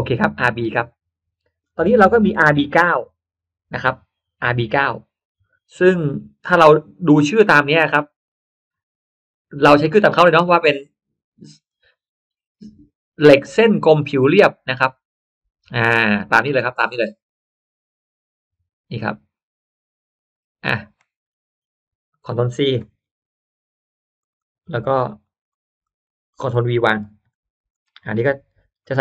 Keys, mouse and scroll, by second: 0.3 click, 8.1 click, 11.6-20.5 drag, 22.7 ctrl+c, 24.1 click, 25.0 click, 25.7 click, 27.0 ctrl+v, 27.7 click, 28.7 click, 28.9 click.